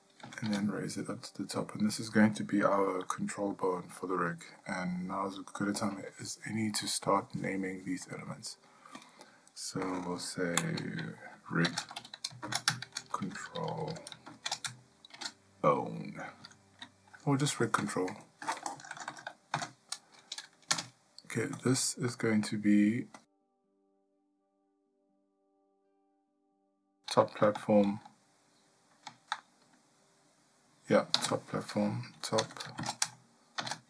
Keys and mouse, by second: 0.2 g, 3.1 shift+middle click, 3.9 ctrl+middle click, 5.1 shift+middle click, 9.0-21.6 drag, 18.8 BackSpace, 23.2-33.8 drag.